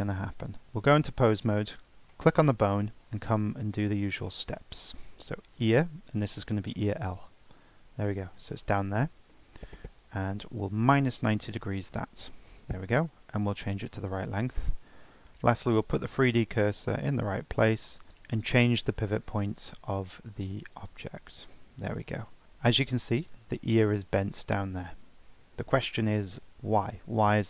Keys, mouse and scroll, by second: 0.6 Tab, 1.4 click, 1.8 scroll down 4, 2.1-3.1 shift+middle drag, 3.1-4.1 scroll down 8, 4.1-7.2 drag, 9.9-13.1 drag, 13.8 click, 14.9-15.3 scroll up 1, 15.3 shift+s, 16.0 Tab, 17.0 scroll down 3, 17.8 click, 18.9-22.0 right drag, 22.2 scroll up 1, 22.4-24.0 shift+middle drag, 24.7 Tab, 25.3 Tab, 25.8-27.3 drag, 27.3 shift+middle click.